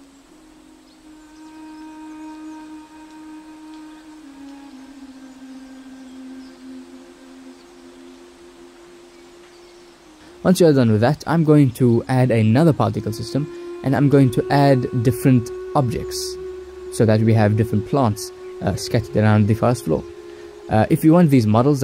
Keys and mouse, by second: 0.2 ctrl+s, 5.3 ctrl+s, 7.0-8.3 drag, 11.4-14.7 drag, 15.1-16.8 drag, 16.6 0, 18.4-19.9 drag, 21.1 click.